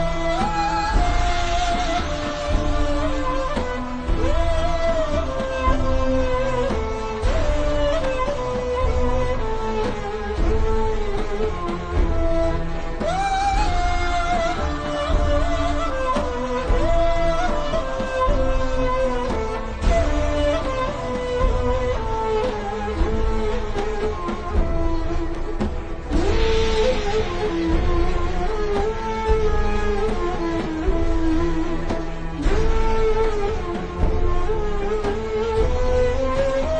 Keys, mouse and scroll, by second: 0.3-0.9 alt+shift+scroll down 2, 2.2-2.5 alt+shift+scroll up 3, 2.8 click, 3.7 a, 3.9 click, 4.1 v, 4.3 click, 4.9 a, 5.1 click, 8.0 v, 8.3 click, 8.5 a, 8.8 click, 9.6 shift+click, 10.9 click, 18.6 v, 18.8 click, 19.8-20.6 alt+scroll down 2, 20.6 click, 21.9-22.6 alt+shift+scroll down 3, 22.8 alt+shift+scroll up 3, 23.0 v, 23.2 click, 25.7 alt+shift+scroll down 1, 26.9-27.3 ctrl+scroll down 2, 27.3 v, 27.5 click, 27.9 scroll down 1, 28.1 v, 28.6 scroll up 1, 29.4 v, 29.5 click, 30.8 scroll down 1, 31.3 click, 35.1 click.